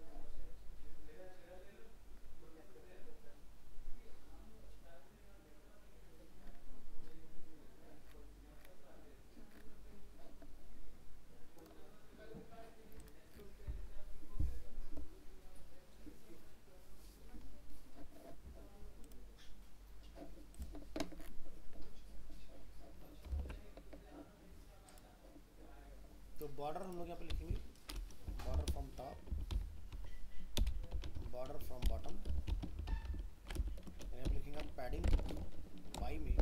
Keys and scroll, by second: 23.4 alt+Tab.